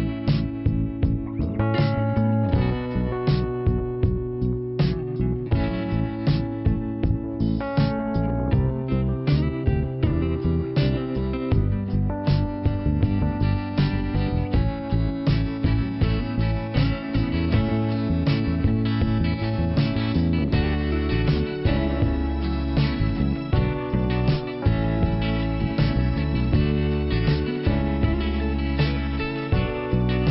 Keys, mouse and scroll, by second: 0.0 click, 0.7 click, 0.8 click, 1.2 click, 1.3 click, 2.3 click, 2.4 click, 4.0 click, 4.1 click, 6.9 click, 8.9 click, 12.1 click, 15.9 click, 16.0 click, 16.6 click, 16.7 click, 17.2 click, 17.3 click, 17.6 click, 17.7 double click, 22.0 click, 23.6 click, 23.6 click, 24.7 click, 24.8 click, 25.1-25.9 scroll down 1, 26.3 click, 30.1 click.